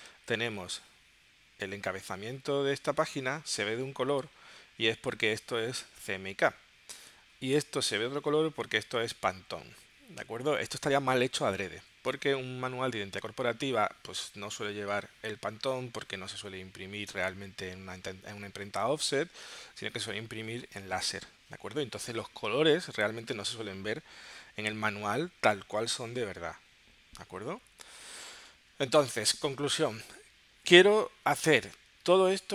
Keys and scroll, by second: 27.8 super+Tab.